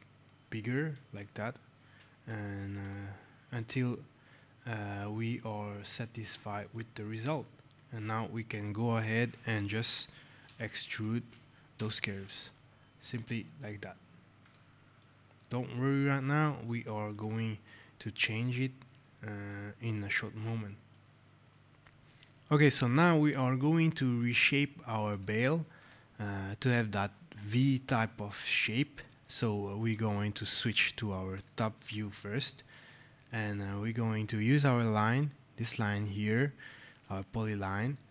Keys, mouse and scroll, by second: 2.7 click, 3.7 right click, 6.2 alt+scroll, 6.6 right click, 10.3 e, 10.9 x, 11.7 Return, 14.3 click, 14.9 right click, 15.9 alt+scroll, 17.0 right click, 17.5-17.8 alt+scroll, 18.0-18.4 alt+scroll, 18.8 alt+scroll, 19.3 right click, 25.0 click, 31.3 click, 32.3 right click, 33.0 alt+scroll, 33.4 right click, 35.9 scroll, 36.8 click.